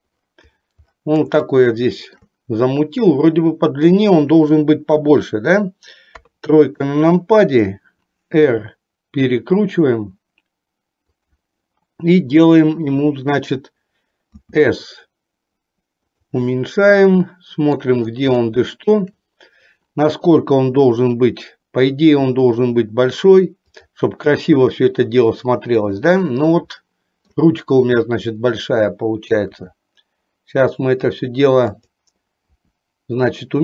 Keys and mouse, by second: 1.6 shift+middle click, 6.2 KP_3, 8.6 r, 14.5 s, 16.9 shift+middle click, 18.5 shift+middle click, 22.2 s, 26.8 shift+middle click, 29.6 r, 32.6 r.